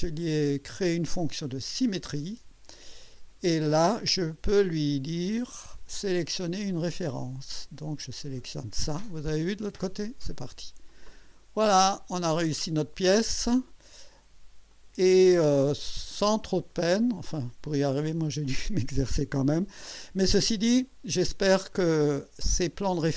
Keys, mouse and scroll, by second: 1.4 click, 3.0 click, 5.1 click, 6.4 click, 8.2 click, 9.2-10.3 drag, 10.9 click, 11.9-12.6 drag, 14.7 click, 15.3 space, 15.6 click, 16.0 space, 17.0 scroll down 2, 17.3 scroll up 2, 18.1-20.2 drag, 20.7 right click, 21.7-23.1 drag.